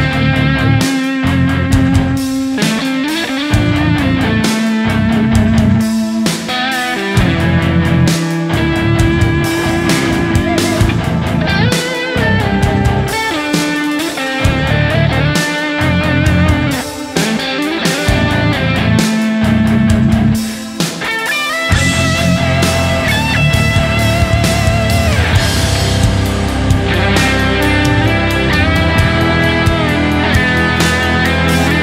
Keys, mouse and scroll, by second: 9.4 shift+right click, 11.1 double click, 12.0 alt+right click, 15.1 alt+right click, 18.0 right click, 19.2 double click, 19.6 shift+click, 20.9 right click, 23.5 alt+right click, 30.3 right click.